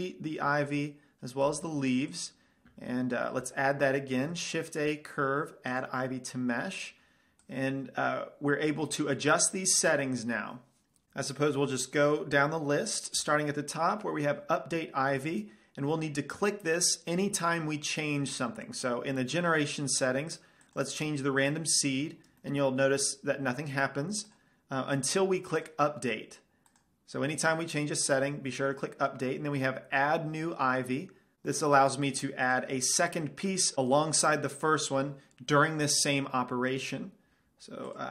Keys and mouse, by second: 0.9-4.1 drag, 1.7 x, 4.4 shift+a, 7.7-9.5 drag, 21.0-22.7 drag, 22.8-24.0 middle drag, 24.0-29.4 drag, 31.7 middle click, 32.8-38.1 middle drag.